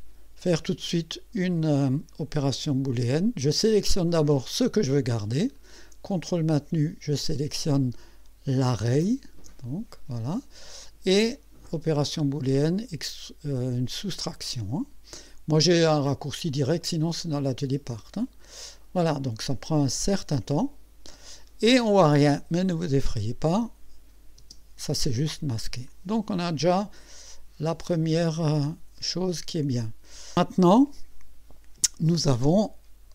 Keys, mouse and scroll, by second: 4.5 click, 8.7 ctrl+click, 18.2 click, 23.5 click, 24.4 space, 25.3 click, 25.9-27.9 drag, 29.0 click.